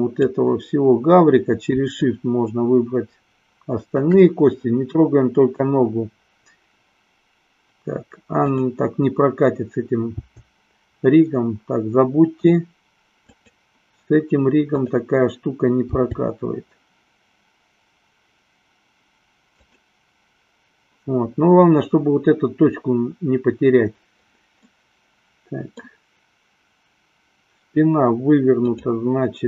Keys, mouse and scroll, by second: 2.1-4.3 shift+drag, 8.5-9.1 drag, 10.3 g, 16.1 g, 24.7-26.2 middle drag, 28.6 click.